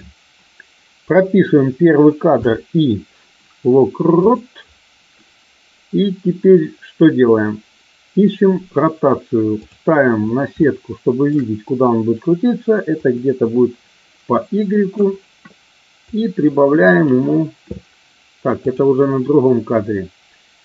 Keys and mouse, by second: 9.6 click, 10.6 shift+middle click, 13.1-14.9 drag, 16.2 click, 18.7 click.